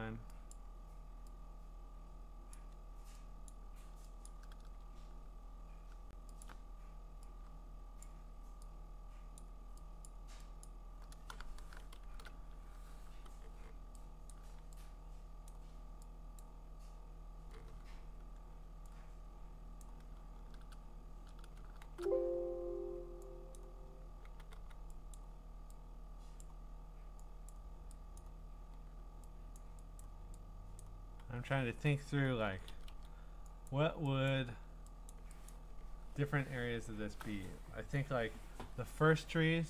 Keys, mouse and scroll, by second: 0.5 click, 2.5 click, 3.5 click, 4.3 click, 6.4 alt+click, 6.5 alt+click, 8.0 click, 9.4 click, 10.1 click, 10.5 right click, 10.6 click, 13.1 5, 14.3 click, 15.5 click, 16.4 click, 19.8 click, 21.8 alt+shift+3, 23.6 click, 24.0-25.0 typing, 25.1 click, 26.4 click, 28.2 click, 29.5 click, 30.0 click, 30.8 click, 32.3 [, 32.4 [, 32.7 [, 32.9 [, 33.7 click, 34.3 click, 35.1 click, 35.5 click, 36.2-37.1 scroll.